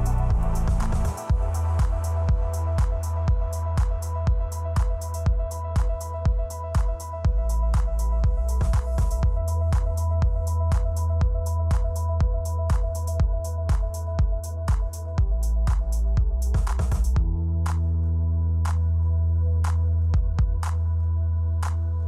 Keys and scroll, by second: 0.2 space, 1.1 space, 2.0 space, 6.8 3, 7.0 Return, 7.5 space, 13.8 space, 14.2 space.